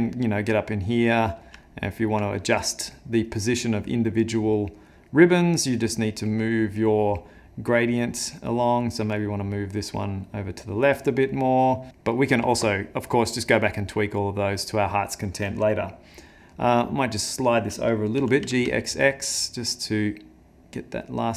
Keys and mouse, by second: 0.3 middle click, 0.7 middle click, 1.7 ctrl+middle click, 5.8 click, 6.9 click, 8.4 click, 12.0 middle click, 14.0 middle click, 16.7 middle click, 17.3 middle click, 18.2 g.